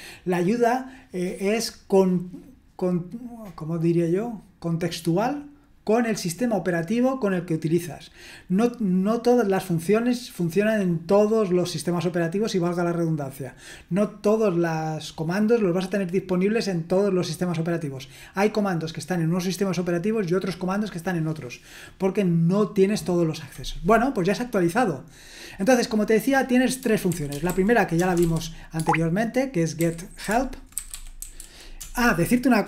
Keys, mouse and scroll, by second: 26.8-32.6 typing.